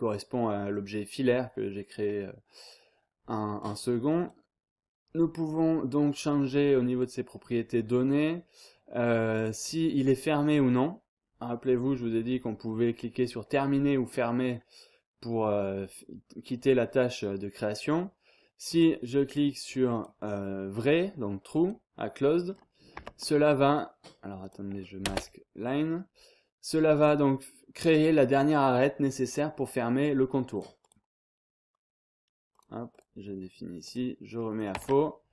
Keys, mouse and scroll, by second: 3.6 click, 9.3 click, 11.8-12.1 scroll up 2, 12.1-12.6 scroll down 2, 18.7 click, 19.9 click, 21.6 click, 22.9 Tab, 24.4 click, 25.0 space, 25.6-26.1 scroll up 1, 30.5 click, 32.5 click, 33.8 click, 34.6 click, 34.7 Tab.